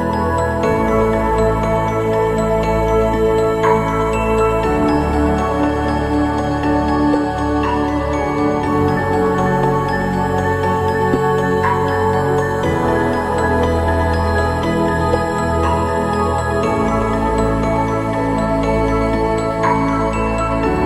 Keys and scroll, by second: 0.3 ctrl+=, 8.1 ctrl+=, 8.2 ctrl+=.